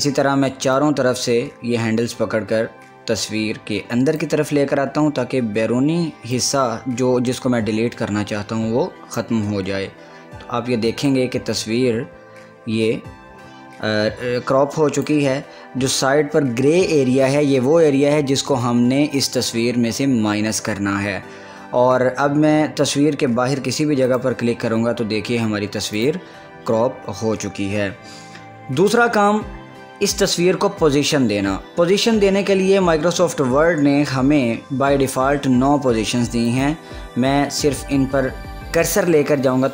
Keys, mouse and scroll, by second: 1.0-6.5 drag, 6.5-11.3 drag, 11.3-17.5 drag, 24.3 click, 38.6 click.